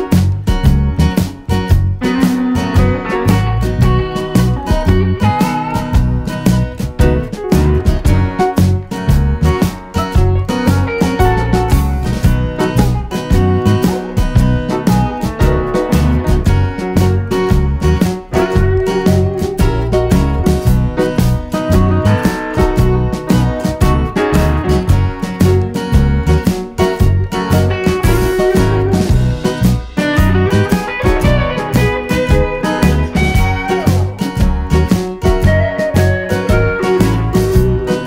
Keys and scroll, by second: 21.0 super+c, 21.2 super+v.